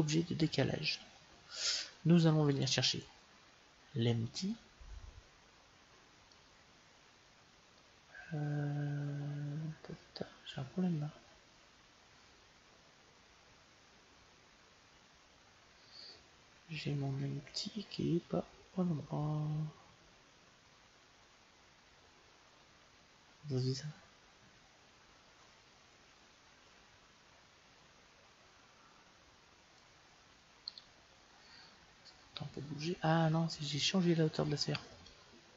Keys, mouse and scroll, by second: 2.5-4.4 drag, 6.3-8.1 middle drag, 30.6-32.3 right drag, 32.3-34.2 middle drag.